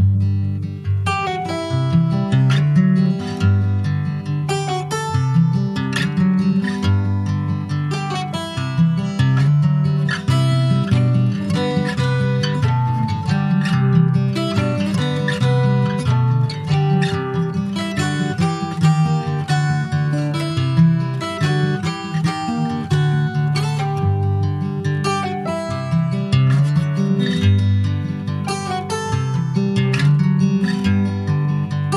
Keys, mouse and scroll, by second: 0.8 shift+click, 1.3-8.4 right drag, 8.4 ctrl+s, 9.8 click, 10.2-11.6 middle drag, 11.6-12.1 shift+scroll up 1, 12.1 ctrl+s, 12.1 click, 12.5 scroll down 2, 12.8-13.8 middle drag, 13.8 ctrl+s, 15.6-18.7 drag, 20.2-21.9 scroll up 4, 20.3 click, 21.9-22.9 scroll up 1, 22.9-25.1 drag, 25.1-25.9 scroll up 1, 25.9-27.2 scroll up 1, 27.2-28.5 scroll up 1, 28.5 scroll up 1, 28.6 click.